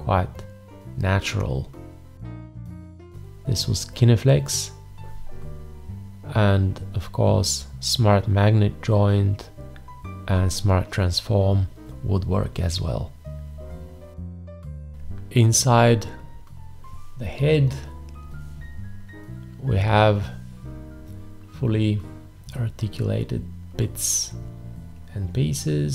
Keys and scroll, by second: 14.6 v.